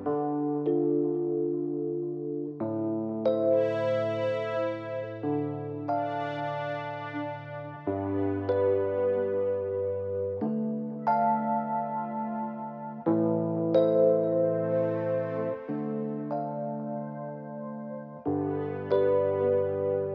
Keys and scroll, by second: 2.8 Page_Up, 8.4 Page_Down, 16.7 0.